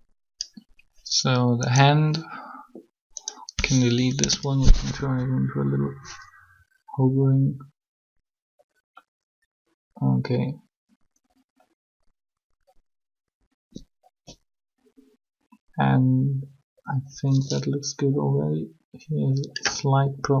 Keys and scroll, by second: 3.7 Delete, 4.0 Return.